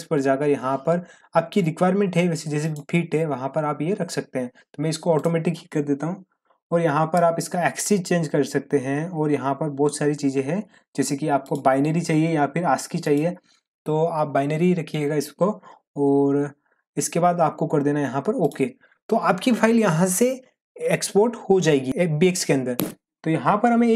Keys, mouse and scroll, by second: 2.6 click, 5.1 click, 7.1-7.9 scroll down 1, 9.2-11.1 scroll down 1, 11.4 click, 18.4 click.